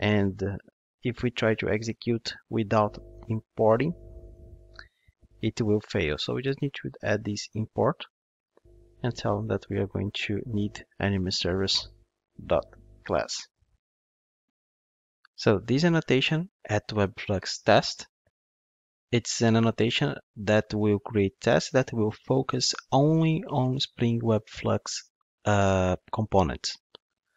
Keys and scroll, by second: 0.6 ctrl+Tab, 7.5 Return.